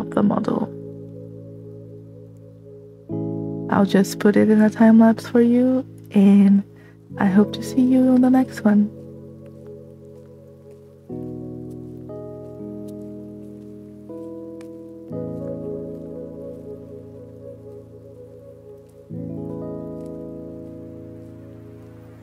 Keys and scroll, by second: 5.9 space.